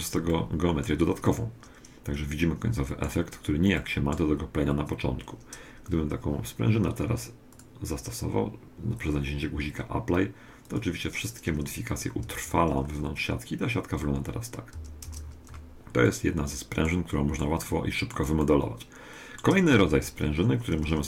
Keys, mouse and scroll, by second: 0.3-3.1 middle drag, 3.8-5.7 middle drag, 7.5-9.5 drag, 10.7-12.6 drag, 12.3 Tab, 12.7 middle click, 13.1-14.7 scroll up 1, 14.7-16.1 scroll up 1, 14.7 a, 15.1 Tab, 16.1-17.3 middle drag, 17.7-20.4 middle drag, 19.7 2, 20.9 1.